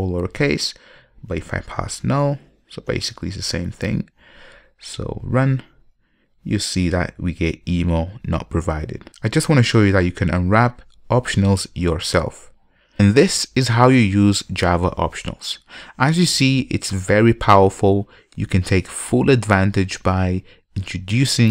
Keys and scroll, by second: 1.8 super+w, 5.2 ctrl+F5.